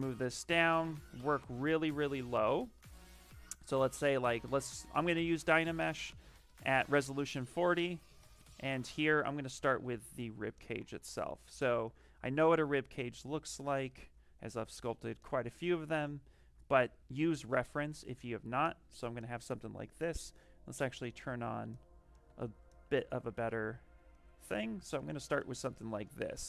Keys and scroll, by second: 9.8 s, 18.3 shift+f, 22.8 s.